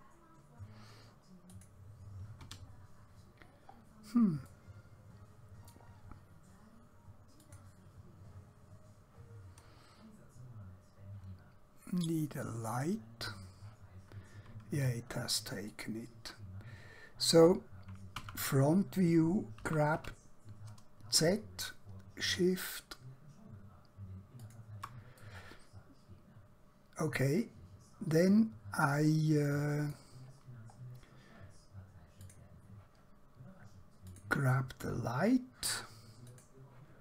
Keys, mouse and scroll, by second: 1.5 click, 2.5 Escape, 3.2-3.8 scroll down 1, 3.8-4.5 scroll up 1, 4.5 middle click, 7.4 click, 12.8 click, 15.7 click, 16.6 scroll down 1, 17.3-18.1 scroll up 1, 18.1 KP_1, 19.6 g, 20.0 z, 24.5 shift+click, 25.3-28.1 middle drag, 30.4 scroll down 1, 32.3 click.